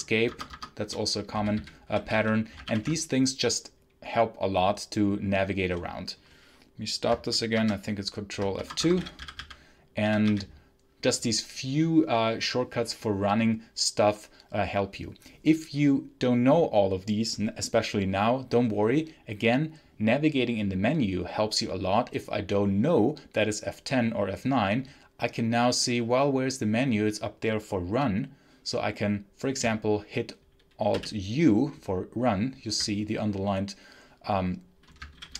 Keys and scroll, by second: 0.2 shift+Escape, 0.5 shift+Escape, 1.2-2.5 typing, 2.5 ctrl+F8, 7.4 ctrl+F2, 8.5 Escape, 8.5-10.1 typing, 30.8 alt+u, 35.0 Up.